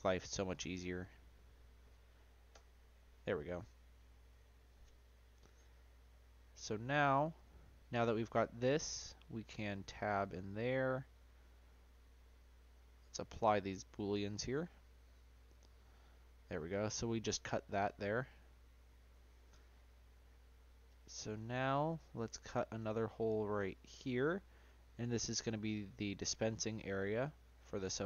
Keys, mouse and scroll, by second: 0.0 drag, 2.9-6.0 middle drag, 6.4-6.9 scroll down 1, 6.9-8.6 middle drag, 8.6-9.6 scroll up 2, 9.6 Tab, 10.7 shift+middle click, 11.5 Tab, 12.3 click, 14.6-16.1 drag, 16.1-19.0 middle drag, 19.0 click, 19.8-22.8 scroll up 2, 23.7 click.